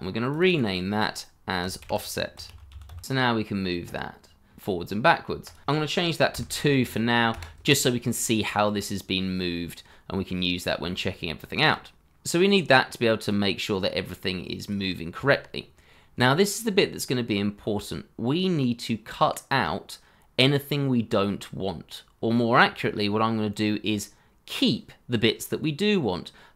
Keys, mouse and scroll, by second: 0.4 double click, 1.8-3.3 typing, 5.6 ctrl+z, 6.3 KP_2, 7.3 KP_Enter, 8.7-9.7 scroll up 1, 10.2-10.7 scroll down 1, 10.8 shift+middle click, 15.9-16.6 scroll down 1, 16.6-18.8 scroll up 1, 22.1-22.7 scroll down 1, 22.7-23.8 scroll up 1, 23.8-24.9 scroll down 1, 26.1-26.5 scroll up 1.